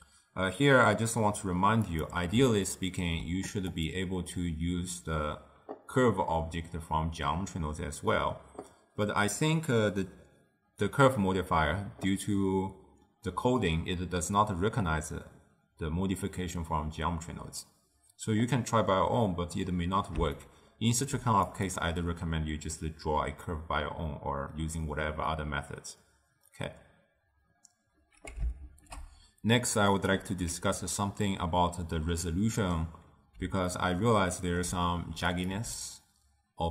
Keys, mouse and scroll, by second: 1.8 click, 2.6-3.7 ctrl+middle drag, 3.7 click, 20.3-21.4 shift+middle drag, 21.4 click, 28.7 ctrl+alt+shift+w, 30.0 ctrl+alt+shift+q, 32.5-35.4 middle drag, 35.4 click, 35.7 m.